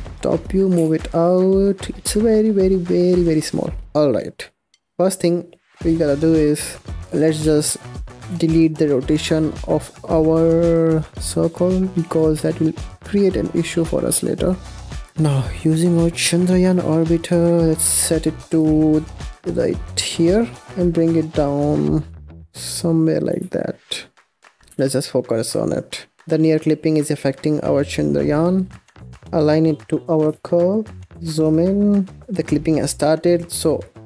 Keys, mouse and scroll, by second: 0.1 KP_7, 0.6 g, 3.9 scroll down 10, 4.0 click, 4.6-5.8 middle drag, 5.8 KP_7, 7.3 n, 8.2 n, 9.5 click, 12.0-13.7 drag, 14.1-15.6 drag, 15.8 click, 16.6 g, 18.4 g, 20.7 g, 21.9 scroll up 6, 22.5-23.2 scroll up 4, 23.2 g, 24.6 shift+middle click, 24.7 KP_Decimal, 25.2-26.2 scroll down 10, 26.2-26.9 scroll up 7, 26.9-28.2 scroll down 5, 28.2-29.0 middle drag, 29.0 scroll up 10, 29.1 shift+middle click, 29.6 scroll up 1, 29.7-30.2 scroll down 1, 30.2 g, 31.1 KP_Decimal, 31.3-31.7 scroll down 3, 31.7-34.0 middle drag.